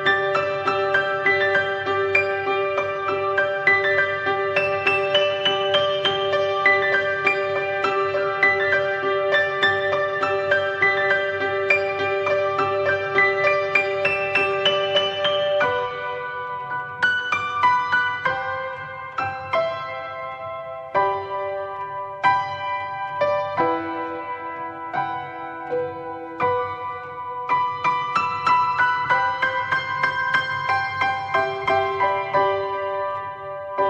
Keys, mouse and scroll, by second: 1.8 click, 2.1-10.7 middle drag, 10.7 click, 11.3 ctrl+t, 13.1-16.0 middle drag, 16.0-17.8 drag, 19.5-19.9 drag, 20.5 drag, 23.0 click, 24.5 click, 26.5 click, 30.6 click.